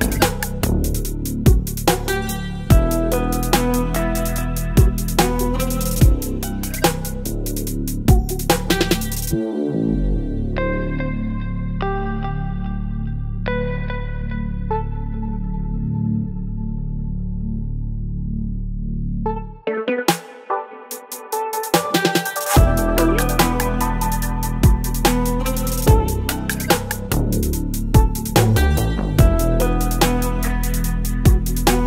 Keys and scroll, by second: 0.1 space, 1.4 ctrl+BackSpace, 1.7 space, 1.9 v, 2.5 space, 5.8 ctrl+j, 6.2 space, 7.4 ctrl+t, 8.6 Return, 9.5 ctrl+t, 11.4 Return, 12.5 ctrl+t, 15.1 Return, 15.6 space, 16.3 Delete, 16.4 space, 18.2 ctrl+BackSpace, 18.4 space, 19.0 v, 19.5 Down, 20.3 Down, 20.4 Down, 20.4 Down, 21.4 space, 22.4 ctrl+j, 22.8 ctrl+t, 24.7 Return, 25.0 ctrl+t, 28.6 Return, 30.4 space.